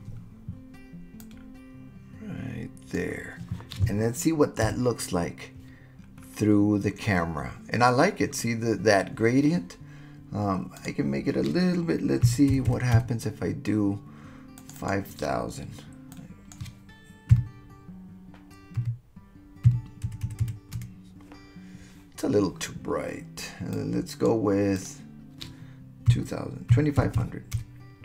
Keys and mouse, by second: 1.2-2.9 drag, 4.6 KP_0, 10.8-13.8 drag, 12.7 KP_0, 14.7-21.9 drag, 20.3 KP_0, 23.8 click, 24.8-28.0 drag, 27.2 KP_0.